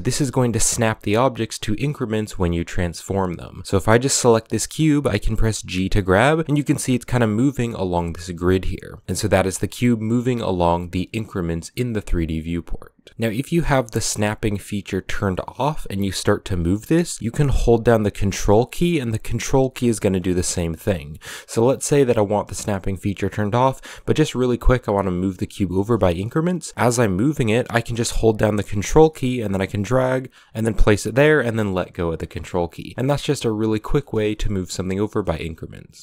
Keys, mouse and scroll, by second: 3.0 right click, 5.2 g, 15.2 click, 16.3 g, 23.6 g, 32.1 scroll up 1, 32.1-33.2 middle drag, 33.2 ctrl+z, 33.8-36.0 shift+middle drag.